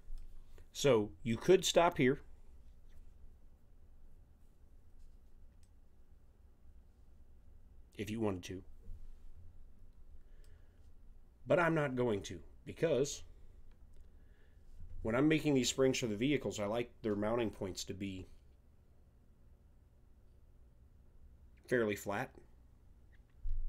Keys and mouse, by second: 5.6-7.1 middle drag, 7.2 middle click.